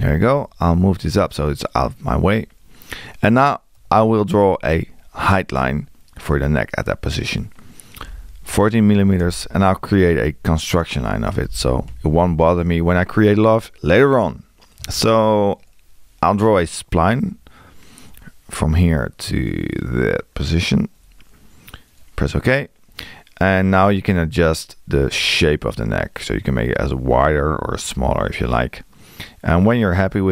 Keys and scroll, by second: 3.8 l, 8.1 4, 11.5 x, 23.8 Escape.